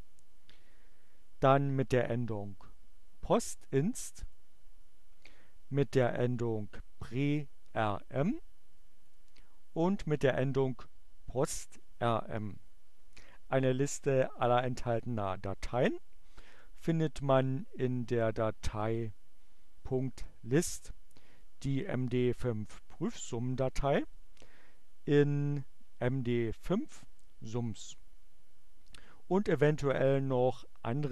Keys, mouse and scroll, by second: 3.9 click, 9.0 click, 11.3 click, 18.2 click, 26.9 click.